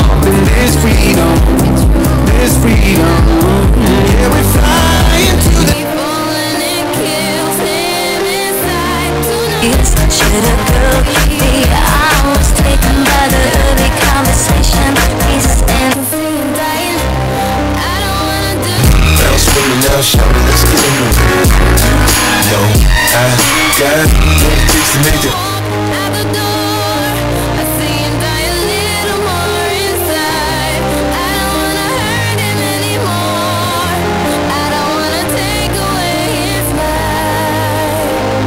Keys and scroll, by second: 6.4 Page_Down, 15.9 Page_Down, 25.6 Page_Down.